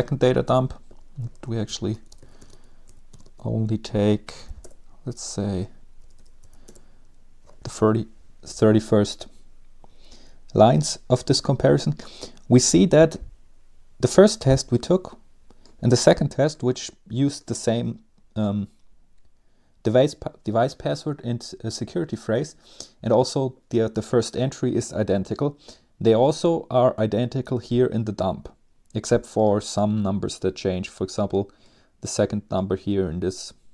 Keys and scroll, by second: 0.0 ctrl+c, 0.4 Up, 1.2-6.4 typing, 5.2 Up.